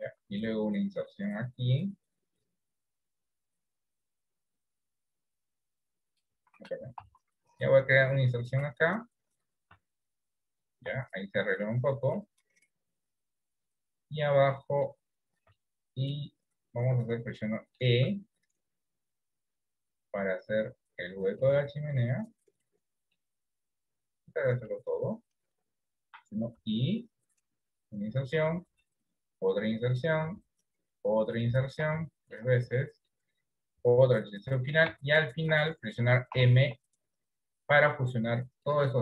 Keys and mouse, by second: 7.1 ctrl+z, 8.3 middle click, 9.9 Tab, 11.0 Tab, 12.3-15.0 middle drag, 15.8 shift+middle click, 17.6 middle click, 18.1 e, 22.2-23.3 middle drag, 24.4 click, 27.8 i, 28.8 i, 31.9 i, 32.3 middle click, 32.9 middle click, 34.1 i, 35.6 shift+middle click, 35.6 shift+i, 36.3 m.